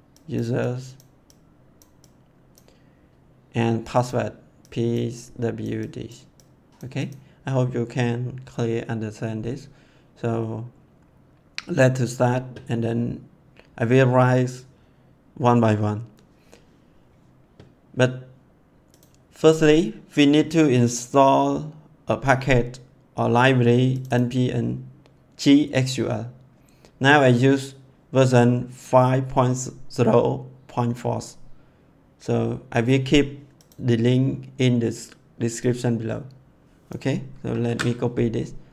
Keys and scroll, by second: 37.6 ctrl+c.